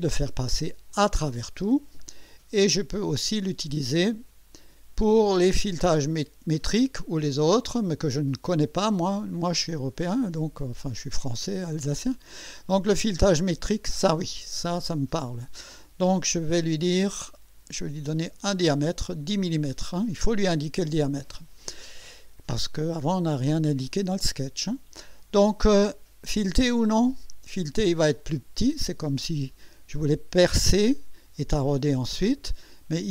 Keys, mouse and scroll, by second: 0.9 click, 3.3 click, 13.4 click, 17.1 click, 18.2 click, 26.7 click, 32.9 click.